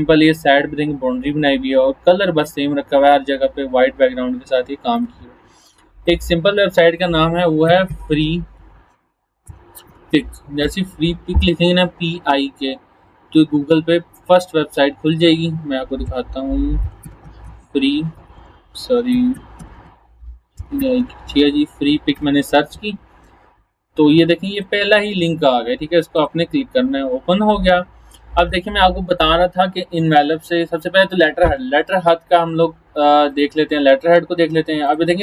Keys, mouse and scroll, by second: 4.9 click, 7.4-10.6 typing, 10.6 Return, 14.2 click, 16.0-21.5 typing, 22.1 Return, 24.5 click, 33.3 click.